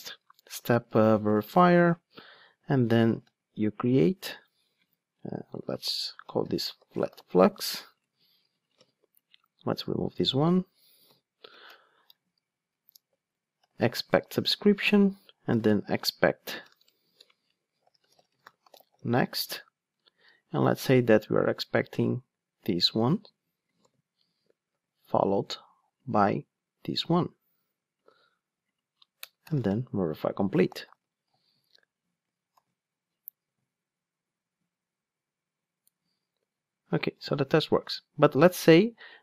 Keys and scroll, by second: 1.4 Return, 8.0 super+c, 9.2 super+v, 9.8 super+x, 17.1 Return, 17.2 alt+BackSpace, 19.4 Return, 22.6 super+c, 23.8 super+v, 27.1 super+c, 28.0 super+v, 30.2 Return, 32.5 ctrl+shift+d.